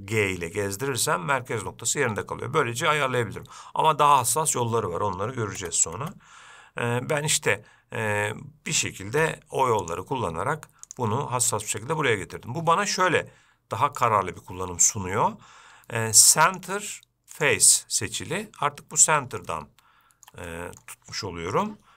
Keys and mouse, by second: 5.8 Tab, 9.4 x, 11.1 click, 14.2-18.6 drag, 19.8-20.5 shift+middle drag, 20.7 middle click, 21.8 g.